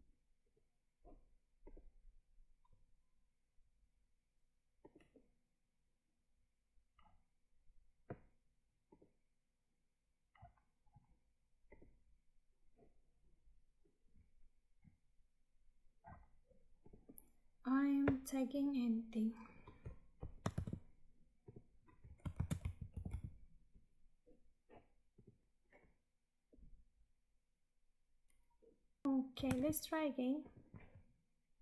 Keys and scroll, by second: 20.4 ctrl+v, 29.0 Tab.